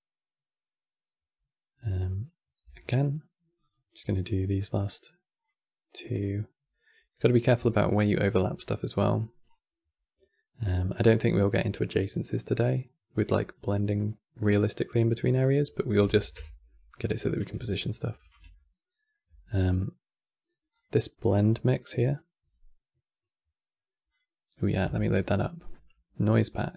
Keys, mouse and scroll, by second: 2.3 e, 4.7-7.3 drag, 7.3 e, 9.6-12.2 drag, 13.6-15.7 middle drag, 15.7 KP_Decimal, 16.0 KP_7, 17.4-20.4 ctrl+middle drag, 20.4-23.8 drag.